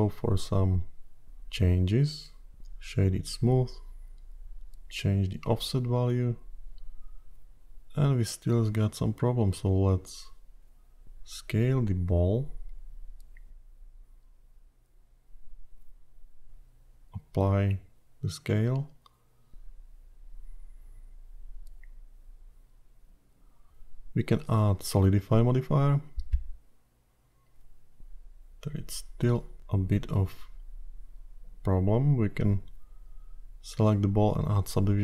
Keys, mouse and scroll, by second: 0.5-0.9 scroll up 3, 2.7 right click, 5.5 click, 12.4 click, 13.3 s, 16.5 q, 19.1-19.5 scroll down 2, 19.4 middle click, 20.3-20.6 scroll up 6, 21.0 click, 22.9 click, 25.1 click, 27.7-28.2 scroll down 3, 28.2 middle click, 32.3-32.9 scroll down 3, 32.9 middle click, 34.9 click.